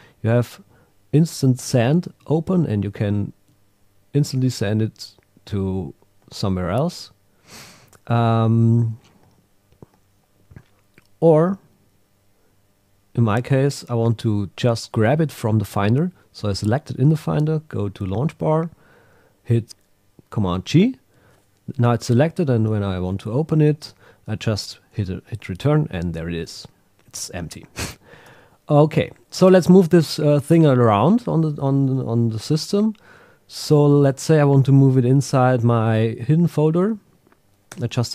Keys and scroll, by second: 6.2 Tab, 17.3 super+Tab, 19.6 super+g, 24.9 Return, 28.3 super+w, 36.5 Left, 37.7 Tab.